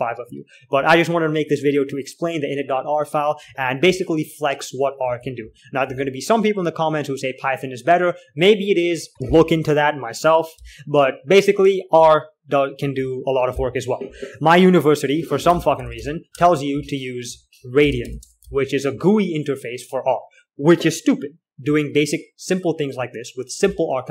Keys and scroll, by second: 0.0-0.5 typing, 5.3-7.3 typing, 11.1-14.6 k, 15.6-20.5 typing, 22.0-22.4 typing, 23.7-24.1 typing.